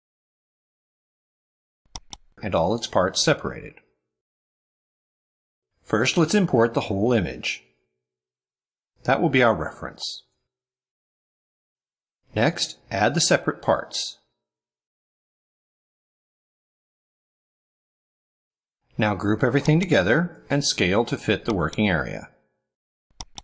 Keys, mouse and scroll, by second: 1.9 click, 3.1-3.4 scroll down 1, 3.7-4.2 scroll down 1, 5.4-6.0 scroll up 1, 7.7-9.1 drag, 10.1-11.4 drag, 12.8-14.9 drag, 15.4-16.6 drag, 17.6 click, 18.5 scroll up 1, 19.6 click, 20.2 scroll down 1, 21.4 shift+click, 22.9 click.